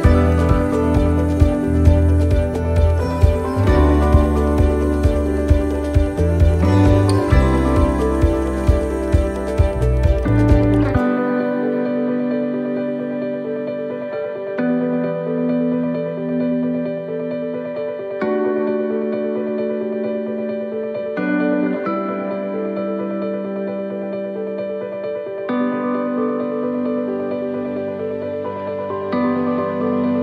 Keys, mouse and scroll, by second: 3.3 right click, 4.3 click, 5.7 click, 9.4 click, 10.0 scroll down 3, 10.5 middle click, 11.7 shift+right click, 13.1 shift+right click, 17.4 click, 20.8 middle click, 25.0 shift+middle click, 25.6 middle click, 26.1 shift+middle click, 26.5-27.0 scroll up 3, 26.9 middle click, 27.4 shift+middle click, 29.0 click.